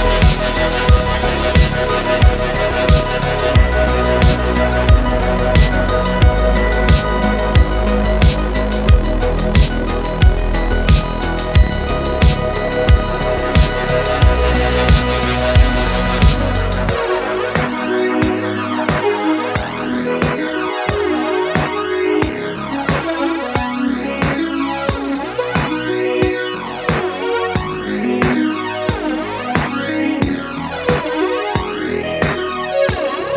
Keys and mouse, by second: 0.1 click, 0.5 click, 2.3 click, 3.4 click, 3.8 click, 4.6 click, 5.8 click, 6.4 click, 6.9 click, 8.0-8.7 middle drag, 9.0 shift+middle click, 9.4 middle click, 10.3 middle click, 11.3 click, 12.0 shift+middle drag, 12.3-12.8 middle drag, 13.3-13.8 middle drag, 14.1 middle click, 15.4-15.9 middle drag, 17.0-18.0 middle drag, 20.0 middle click, 20.5 shift+a, 20.8 middle click, 21.6 click, 21.8 middle click, 22.6-24.8 typing, 25.5 Return, 26.1 middle click, 26.7 click, 26.9-27.3 middle drag, 27.6 click, 27.9 middle click, 28.5-29.5 drag, 29.8 click, 30.6-31.7 drag, 32.5 e, 32.9 z.